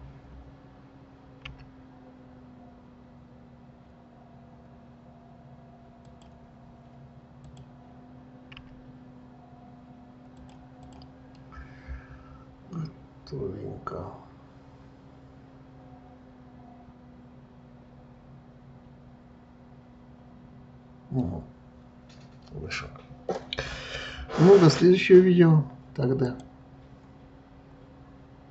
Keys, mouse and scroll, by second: 1.7 s, 7.7 click, 8.8 s, 11.1 click, 11.6-14.6 middle drag, 21.9-22.6 scroll down 2, 22.6-23.0 scroll up 2.